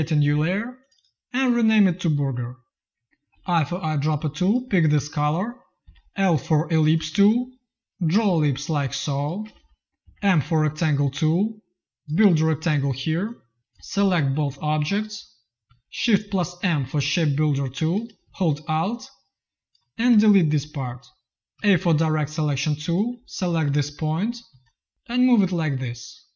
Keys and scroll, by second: 5.8 l, 8.1 shift+space, 9.3 space, 9.9 m, 12.8 v, 16.1 shift+m, 21.4 a, 24.4 z.